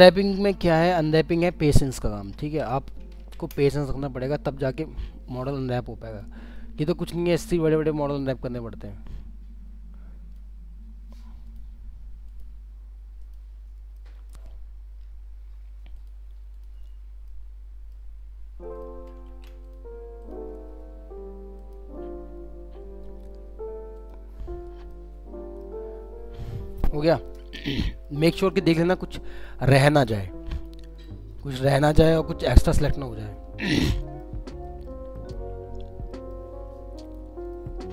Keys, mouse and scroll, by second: 0.1 alt+click, 1.1 alt+middle click, 2.5 ctrl+z, 3.2 ctrl+z, 4.6 alt+click, 7.4 scroll up 1, 7.9 middle click, 9.1 alt+click, 11.5 alt+click, 13.6-13.9 alt+scroll down 1, 13.9 alt+middle click, 14.5 alt+scroll down 2, 15.0-15.6 scroll up 1, 16.0 alt+click, 16.8 alt+scroll down 1, 17.3 alt+middle click, 18.2-18.6 alt+scroll up 2, 18.7 alt+click, 19.3 ctrl+z, 19.6 alt+click, 20.5-20.9 scroll down 2, 21.6 alt+click, 24.0 alt+click, 24.4 scroll down 2, 24.9 alt+middle click, 26.2 scroll down 1, 26.9 scroll up 1, 27.8 alt+middle click, 28.8 scroll up 1, 29.1 middle click, 30.6 ctrl+click, 33.3 alt+middle click, 35.1 middle click, 35.5-36.1 scroll down 1, 36.1 middle click, 37.0 ctrl+click.